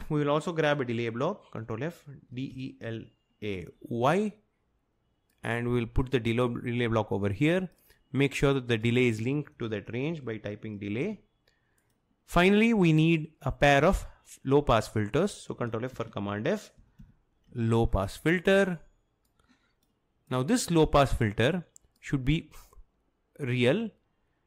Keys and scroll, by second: 1.7 ctrl+f, 2.1-3.4 typing, 9.1-11.0 typing, 16.0 ctrl+f, 16.5-18.0 typing.